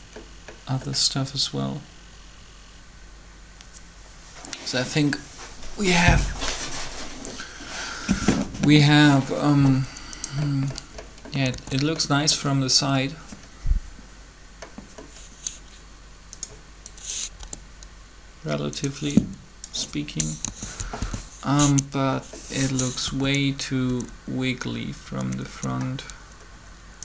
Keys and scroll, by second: 11.5 alt+a, 17.3 g, 20.2 3, 21.0 1, 23.0 Up, 23.8 Up.